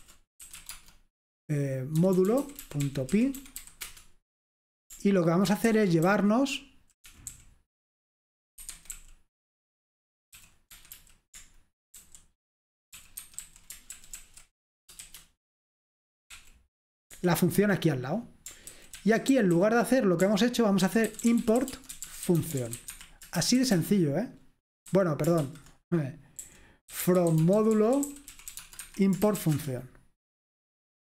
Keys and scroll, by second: 0.0-4.1 typing, 5.5 ctrl+w, 5.7 ctrl+w, 5.9-9.1 typing, 10.2-13.9 typing, 14.0 ctrl+w, 14.2 ctrl+w, 15.1 shift+g, 17.1 Escape, 18.7 ctrl+w, 19.1 ctrl+w, 19.4-30.8 typing.